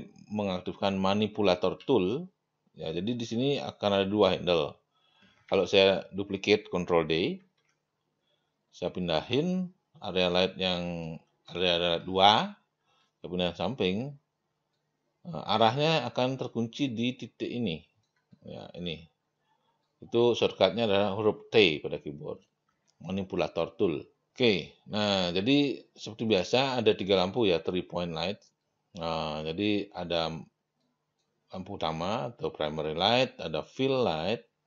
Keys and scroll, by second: 1.8 t, 7.4 ctrl+d.